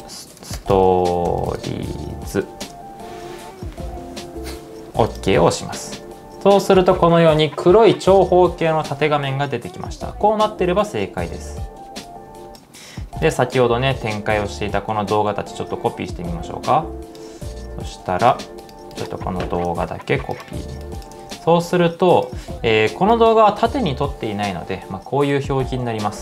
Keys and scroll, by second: 3.7 typing, 19.7 super+c, 21.3 super+v.